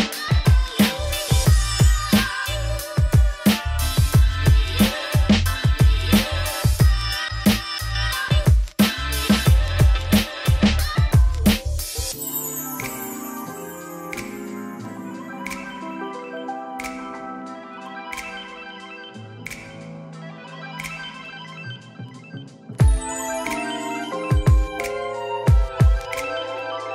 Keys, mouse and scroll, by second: 0.9 click, 1.0-2.2 drag, 2.3-3.4 drag, 3.4-4.7 middle drag, 5.1 click, 6.5-8.9 drag, 11.5 click, 11.7-12.3 scroll down 6, 12.7-13.1 scroll up 4, 13.1-14.9 shift+drag, 14.9-16.1 middle drag, 17.2-17.6 scroll up 2, 17.6-18.8 drag, 19.1 middle click, 19.2 scroll down 7, 19.4-20.7 middle drag, 20.7 scroll up 8, 21.0 middle click, 21.5 scroll down 9, 21.7 shift+middle click, 22.0 click, 22.3 click, 22.4 x, 22.6 click, 23.2 alt+d, 24.4 shift+middle click, 24.7-25.3 scroll up 1, 25.3 shift+middle click, 25.7 click, 26.8 click.